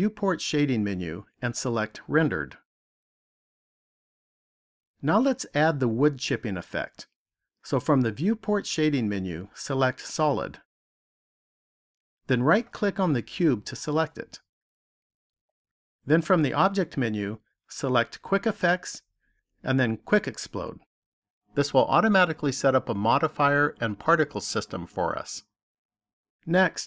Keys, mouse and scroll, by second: 0.3 click, 2.6 click, 9.2 click, 11.1 click, 13.4 right click, 17.0 click.